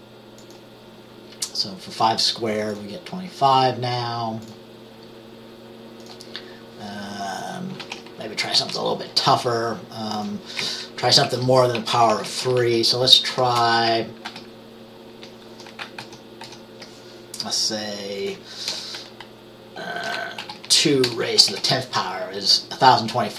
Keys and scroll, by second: 7.9 ctrl+a, 8.7 Down, 11.0 Left, 11.3 Right, 11.9 shift+Down, 12.0 shift+Down, 12.2 shift+Down, 12.3 shift+Down, 14.3 ctrl+c, 16.1 ctrl+v, 16.5 ctrl+v, 18.8 BackSpace, 20.5-23.0 typing, 20.7 Down.